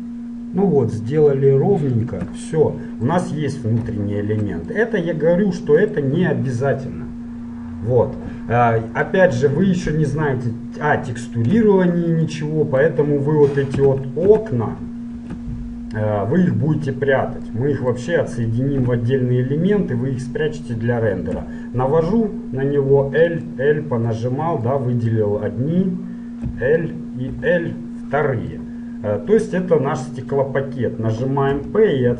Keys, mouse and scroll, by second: 2.6-6.6 middle drag, 8.6-11.6 middle drag, 11.6 z, 12.5-14.0 middle drag, 14.0 a, 14.4 a, 15.3 ctrl+n, 18.9 middle click, 19.0 a, 21.5 l, 23.1 l, 23.6-27.6 middle drag, 26.6 l, 27.6 l, 28.8-30.4 middle drag, 30.4 click, 31.7 p.